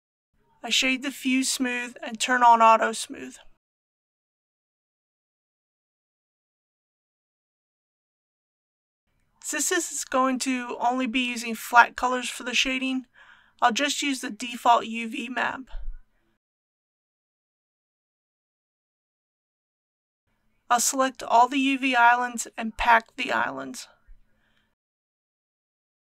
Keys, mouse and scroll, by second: 4.0 right click, 5.4 click, 12.6-13.1 scroll up 1, 14.2 Tab, 15.2 a, 16.2 Tab, 17.8 a, 18.9-20.2 scroll up 1, 20.2-22.6 drag.